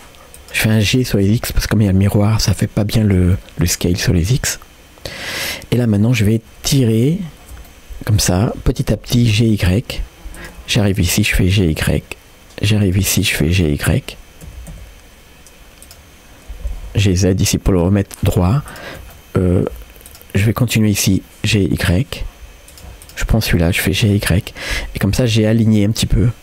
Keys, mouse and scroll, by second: 3.4-5.9 middle drag, 6.1 middle click, 6.7 click, 7.7 middle click, 9.4 g, 10.8 shift+click, 11.6 g, 13.2 shift+click, 13.6 middle click, 14.5 g, 16.6 g, 18.7 shift+click, 19.2 middle click, 20.1 shift+click, 20.5 middle click, 20.9 scroll up 1, 21.5 g, 23.0 shift+click, 23.9 g, 25.4 shift+click, 25.7 scroll down 1, 25.9 middle click.